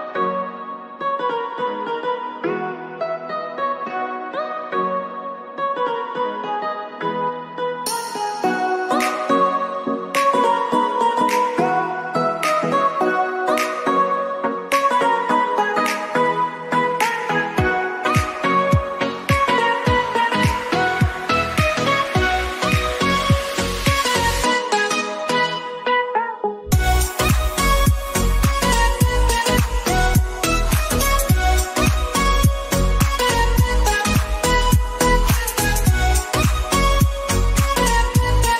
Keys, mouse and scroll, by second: 0.0-0.9 typing, 2.4 click, 3.8 click, 6.1 click, 7.3 Up, 9.7 Up, 9.9 alt+Right, 11.8 click, 15.6 click, 16.6 ctrl+o, 17.3 click, 19.8 ctrl+o, 20.8 click, 23.5 click, 23.7 alt+scroll down 1, 24.5-26.6 drag, 26.6-30.3 drag, 32.3 alt+scroll down 1, 33.2 click, 34.1-35.9 drag, 35.9 alt+scroll down 1, 36.2 alt+scroll up 1, 36.6-38.2 drag.